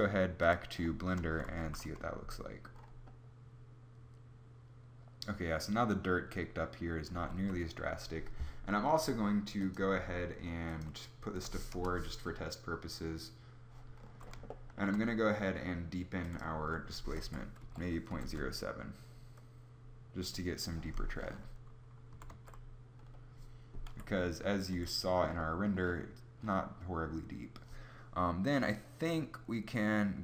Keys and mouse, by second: 1.2 shift+z, 7.2 z, 7.3 z, 21.7 z, 21.9 z, 23.4 F11, 24.3 F11.